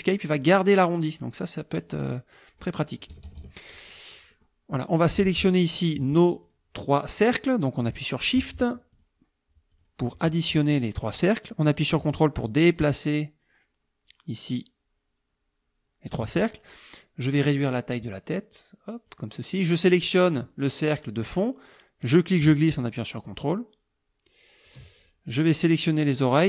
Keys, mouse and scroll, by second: 1.2-2.0 drag, 3.1 KP_Subtract, 3.9 click, 5.0 click, 6.3 click, 7.8 click, 8.9 shift+click, 9.7 shift+click, 11.7-16.3 ctrl+drag, 17.3 click, 18.5 click, 19.7 click, 22.0-24.9 drag, 25.0 ctrl+click, 25.3-25.8 ctrl+drag, 25.9 click.